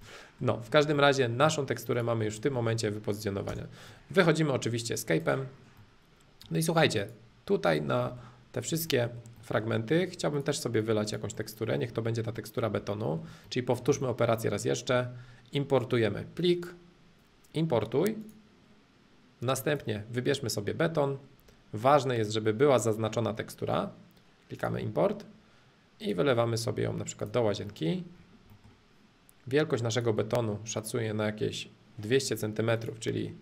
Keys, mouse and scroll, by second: 0.0-1.9 middle drag, 1.9 click, 2.4-3.5 middle drag, 3.5 space, 3.9-5.1 middle drag, 5.1 click, 5.5-7.0 middle drag, 7.0-8.0 drag, 8.0 middle click, 8.5 click, 8.9-10.3 middle drag, 10.3-11.3 drag, 11.3-12.7 middle drag, 12.9-13.9 shift+middle drag, 14.0-16.0 shift+middle drag, 16.4-18.4 drag, 19.6-21.6 drag, 24.6-26.6 drag, 27.2 click, 27.7-29.9 middle drag, 29.9-31.9 drag, 32.7 click.